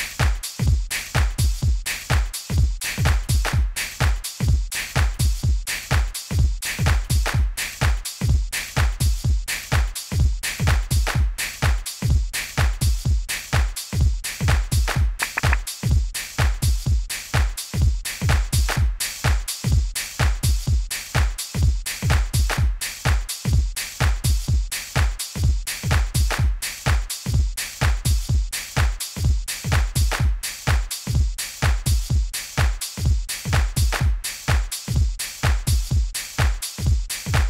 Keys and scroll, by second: 7.3 super+u.